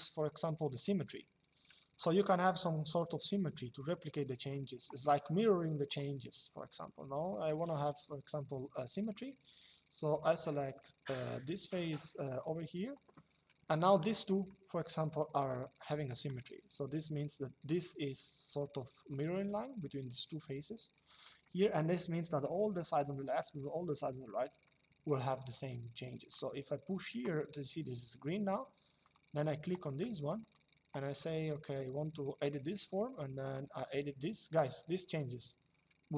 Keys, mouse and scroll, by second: 0.4 click, 5.6 click, 9.8 click, 12.1 click, 13.8 shift+middle click, 21.2 shift+middle click, 24.4 shift+middle click, 26.0 click, 28.7 click, 30.1 click, 32.1 click, 33.2 click.